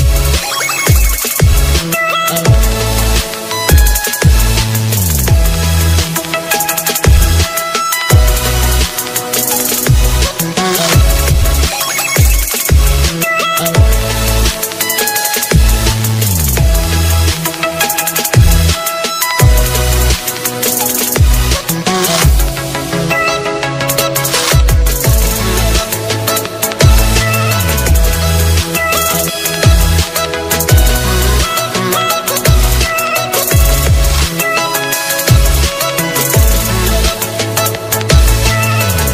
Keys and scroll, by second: 2.5 ctrl+e, 3.0 ctrl+space, 6.7 ctrl+space, 38.0 alt+space.